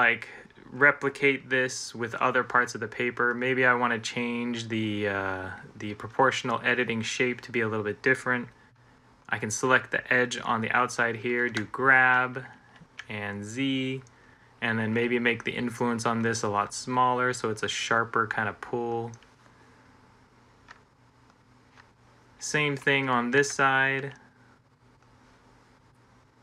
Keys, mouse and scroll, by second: 11.5 g, 12.6 z, 23.2 g.